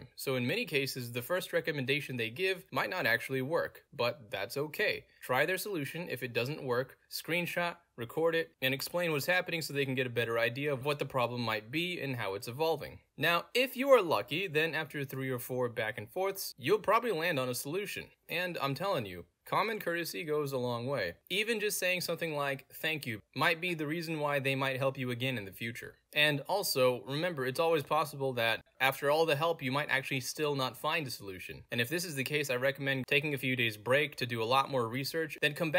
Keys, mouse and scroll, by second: 0.8-1.7 scroll down 1, 1.7-3.2 scroll down 1, 3.2-4.2 scroll down 1, 4.2-5.2 scroll down 1, 5.2-6.2 scroll down 1, 6.2-7.9 scroll down 1, 7.9-8.3 scroll down 1, 9.1 click, 9.7-10.5 scroll down 2, 11.4 click, 12.6-13.1 scroll down 2, 13.1-13.5 scroll down 1, 13.9-14.8 scroll down 2, 14.8-24.5 middle drag, 14.8-16.5 scroll down 1, 16.5-17.0 scroll down 1, 17.0-18.2 scroll down 1, 18.2-19.2 scroll down 1, 19.2-19.7 scroll down 1, 19.7-21.2 scroll down 1, 21.2-22.2 scroll down 1, 22.2-22.7 scroll down 1, 22.7-24.2 scroll down 1, 24.2 scroll down 1, 25.4-26.2 scroll down 2, 26.2 scroll down 1, 27.1 click, 27.8-28.6 scroll down 2, 30.0 click, 31.2 middle click, 31.2-32.2 scroll down 2, 33.0 click, 34.1 click, 34.5 middle click, 34.5-34.9 scroll down 2.